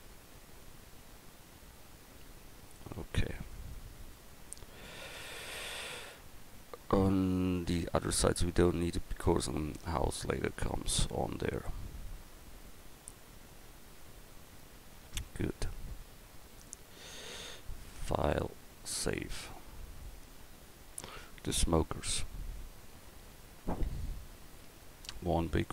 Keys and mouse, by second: 21.6 KP_1.